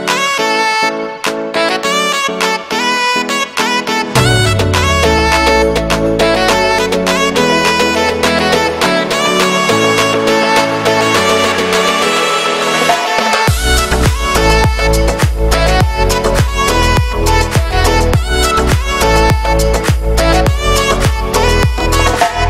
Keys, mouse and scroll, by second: 0.2 scroll up 1, 0.4 shift+d, 1.2 scroll down 1, 1.4 g, 2.7 scroll down 1, 2.9 shift+middle click, 3.4-3.8 scroll down 1, 3.8 right click, 4.7 k, 5.1 l, 5.3 x, 8.8 b, 11.1 shift+d, 12.4 z, 12.8 shift+middle click, 13.5 scroll down 2, 13.7 scroll up 2, 13.8 g, 15.0 scroll down 4, 15.2-16.3 middle drag, 16.3 scroll down 2, 16.5-16.8 scroll up 1, 16.8 Tab, 17.1 shift+middle click, 17.5-18.0 scroll up 1, 18.0 Tab, 18.3 ctrl+r, 18.9 scroll up 1, 19.1 ctrl+b, 20.2 shift+middle click, 20.6 scroll up 1, 21.2 click, 21.4 scroll down 1, 21.6 shift+middle click, 22.0 scroll up 1.